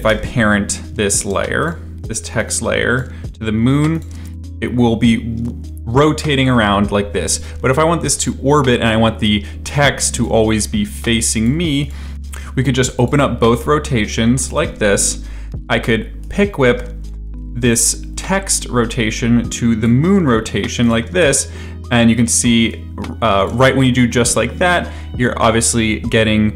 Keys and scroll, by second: 0.1 u, 1.2 space, 4.1 space, 13.4 r, 14.5 r, 21.1 space, 23.5 space.